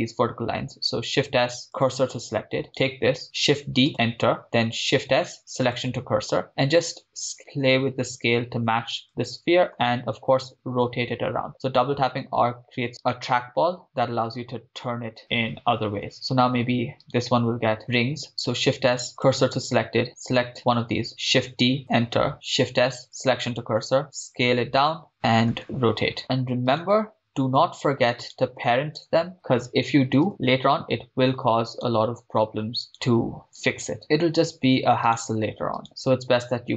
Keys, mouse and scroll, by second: 1.3 shift+s, 2.9 right click, 3.6 shift+d, 3.9 Return, 5.0 shift+s, 6.9 s, 9.1 click, 9.9 r, 10.0 r, 12.9 click, 17.4 drag, 17.4 right click, 18.6 shift+s, 20.1 right click, 21.6 shift+d, 21.8 Return, 22.3 right click, 22.3 shift+s, 24.2 s, 25.1 click, 25.6 r, 25.8 r, 26.2 click, 26.8 click, 26.8 right click, 28.5 shift+right click, 29.3 ctrl+p, 32.0 click, 32.0 right click, 32.9 shift+right click, 33.8 click, 33.8 right click, 34.0 ctrl+p, 35.3 click, 35.3 right click, 35.9 shift+right click, 36.3 scroll up 4.